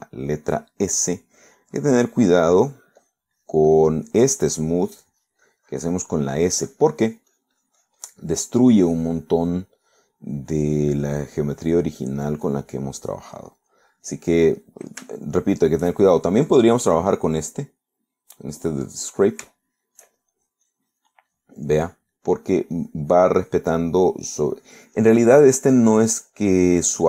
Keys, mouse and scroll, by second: 0.2 s, 2.3 click, 2.8 click, 3.2 click, 3.7 click, 5.3-9.4 drag, 9.4 middle click, 9.9 click, 10.5 click, 11.3 click, 12.4 click, 13.5 click, 14.2 click, 16.4 shift+middle click, 17.5 click, 19.9 click, 20.7 shift+middle click, 21.4-23.6 shift+drag, 23.8 shift+click, 24.4-27.0 drag.